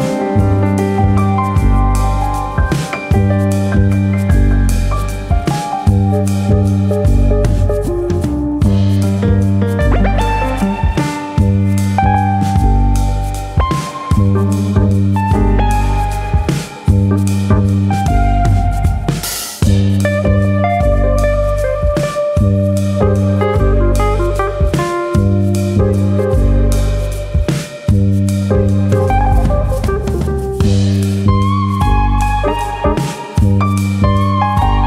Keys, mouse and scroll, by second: 3.7 right click, 6.1 click, 7.0 click, 11.0 click, 15.2 click, 17.7 click, 20.8 click, 22.7 click, 23.1-23.6 scroll up 1, 23.6 click, 24.4 click, 25.2 click, 26.1 click, 26.7 click, 28.1 middle click, 29.0 click, 29.3 click, 30.0 ctrl+KP_Add, 31.0 i, 32.4 click, 33.0 middle click, 34.1 e.